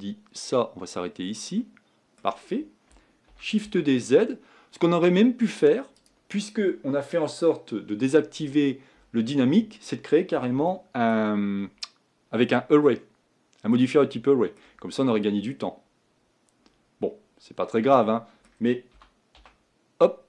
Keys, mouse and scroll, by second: 0.9 b, 1.6-3.8 middle drag, 3.8 shift+d, 10.7-14.9 shift+middle drag, 14.9-16.7 scroll up 4, 16.7-17.7 scroll up 3, 17.7-19.1 middle drag, 19.1 g.